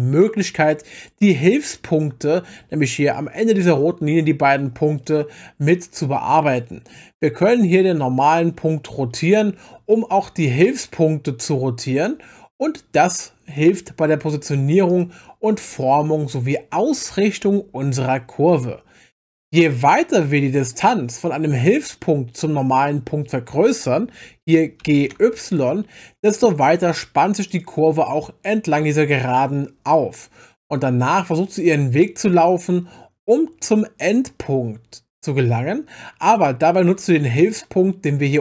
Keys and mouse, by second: 1.0 click, 3.6-5.0 drag, 6.5 click, 9.0 r, 10.5 z, 14.9 click, 19.6 click, 24.8 g, 25.1 y, 27.5 click, 33.3 click, 36.7 click.